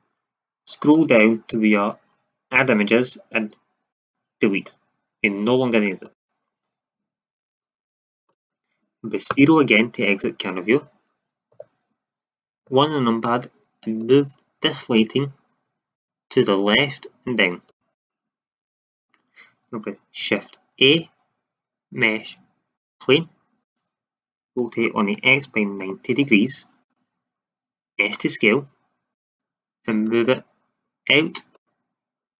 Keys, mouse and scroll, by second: 9.2 KP_0, 11.4 Up, 12.6 KP_1, 15.8-16.1 drag, 16.7-17.6 drag, 18.0-18.5 middle drag, 20.7 shift+a, 24.5 r, 27.9 s, 29.2-30.3 drag.